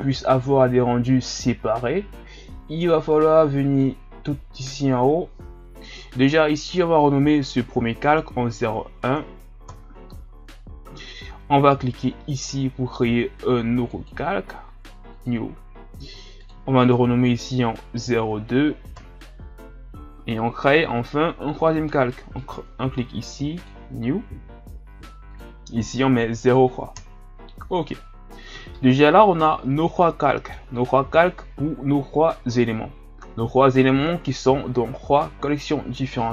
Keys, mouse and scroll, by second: 3.1-9.8 drag, 13.9-19.6 drag, 22.3-28.4 drag, 28.7-34.0 middle drag.